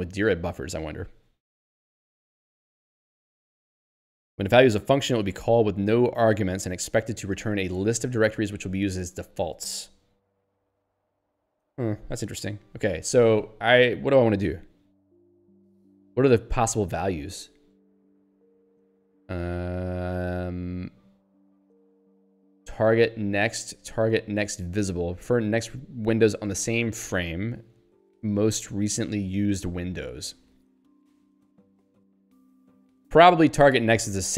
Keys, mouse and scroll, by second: 16.2 scroll down 1, 17.8 scroll up 1.